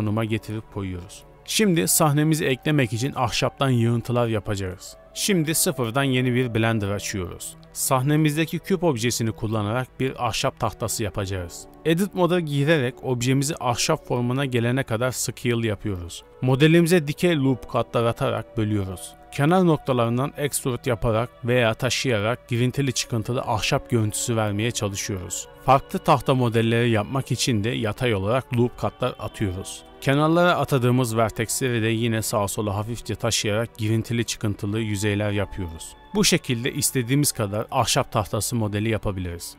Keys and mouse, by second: 2.1 shift+drag, 10.8 s, 11.7 z, 13.9 click, 14.2 ctrl+r, 16.0 3, 16.8 1, 17.4 b, 18.3 g, 19.9-23.8 typing, 24.9 b, 25.4 g, 26.5 Tab, 26.8 shift+d, 26.8 z, 27.3 ctrl+r, 28.4-32.1 typing, 32.8 middle click, 33.2 b, 34.0 g, 35.1 shift+middle click, 35.5 b, 36.2 g, 37.3 b, 37.7 g, 39.1 click.